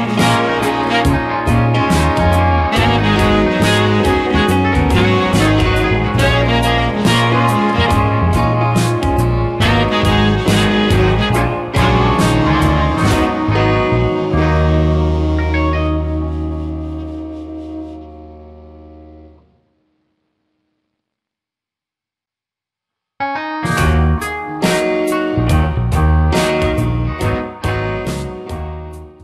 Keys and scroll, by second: 11.5 space.